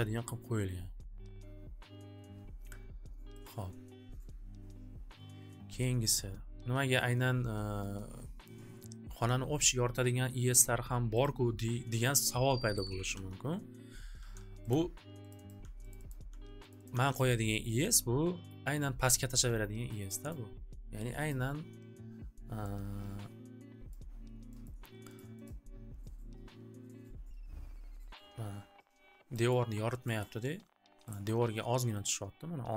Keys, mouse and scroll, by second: 3.4 click, 6.1-7.6 drag, 11.3 click, 12.9 scroll, 13.0 alt+w, 13.1 alt+w, 14.1 c, 14.7 click, 15.3 click, 15.4 click, 15.6 c, 15.9 click, 16.0 click, 16.2 c, 16.7 click, 16.8 click, 16.9 c, 17.1 click, 17.3 click, 18.4 click, 19.6 click, 20.4 click, 21.2 click, 23.3 scroll, 23.9 scroll, 24.6 scroll, 25.2 click, 25.5 click, 29.5 scroll, 30.3 scroll, 31.2 scroll, 32.1 scroll.